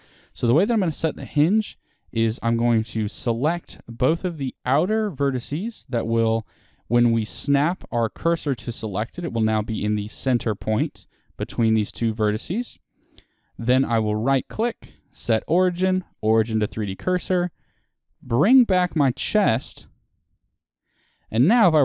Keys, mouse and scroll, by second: 0.0 middle click, 0.0 1, 0.7 click, 2.2 shift+click, 2.7 middle click, 5.1 middle click, 5.8 middle click, 8.4 shift+s, 9.0-12.2 middle drag, 12.2-12.7 scroll down 2, 12.7 Tab, 16.1 right click, 16.8-18.6 middle drag, 18.6 click, 19.3-21.6 middle drag, 20.9-21.5 scroll down 1, 21.6 r.